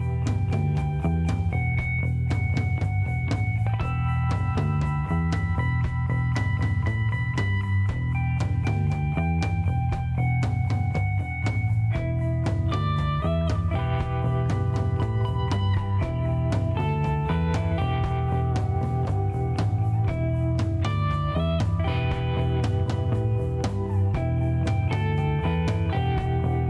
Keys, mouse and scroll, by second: 0.8 middle click, 2.7 click, 3.3 click, 4.1 shift+right click, 5.7 scroll down 1, 7.4 click, 9.5 click, 10.2 click, 13.3 click, 14.4 middle click, 15.2 shift+right click, 16.3 shift+middle click, 16.9 middle click, 17.8 shift+right click, 19.1 shift+right click, 23.7 shift+scroll down 2, 24.2 middle click, 24.6 shift+right click, 25.8 shift+scroll down 2, 26.0 shift+middle click, 26.4 right click.